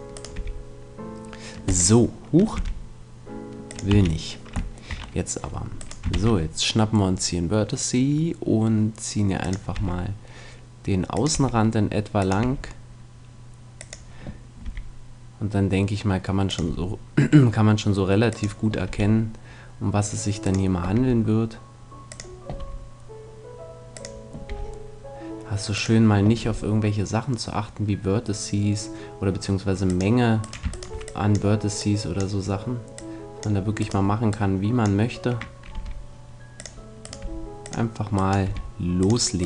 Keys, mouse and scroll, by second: 0.1-1.3 right drag, 0.3 g, 2.1-3.3 drag, 2.5 g, 3.9 click, 3.9 a, 6.1 shift+d, 9.5-15.7 drag, 9.7 e, 11.3 e, 12.4 e, 14.6 e, 16.7-18.3 drag, 16.7 e, 18.4-20.1 drag, 18.9 e, 20.9 e, 22.6-23.9 drag, 22.6 e, 24.0-27.7 drag, 24.5 e, 26.4 e, 29.9-36.1 drag, 30.4-32.4 right drag, 32.4 right click, 33.8-35.7 right drag, 35.7 g, 36.6-39.4 drag, 37.0-39.4 right drag, 37.2 g, 38.5 g.